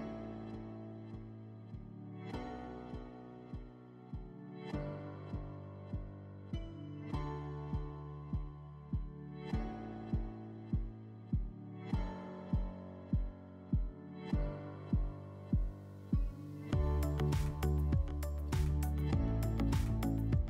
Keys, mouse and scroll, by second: 1.4 click, 1.6 click, 1.9 click, 2.0 click, 2.2 click, 2.6 click, 3.8 click, 5.7 click, 7.7 middle click, 11.4 click, 13.9 click, 15.4 click, 16.5 e, 18.8 click, 19.7 click.